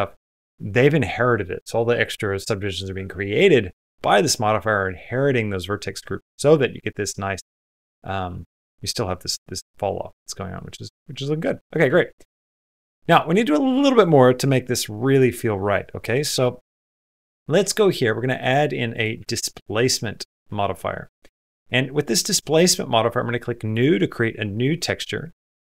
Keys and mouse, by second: 6.6 middle click, 7.6 middle click, 10.0 middle click, 10.4 middle click, 11.2 middle click, 11.4 middle click, 11.8 shift+middle click, 12.0 middle click, 12.4 shift+middle click, 13.0 shift+middle click, 15.9 middle click, 16.2 space, 17.5 click, 18.4-19.7 drag, 23.4 click.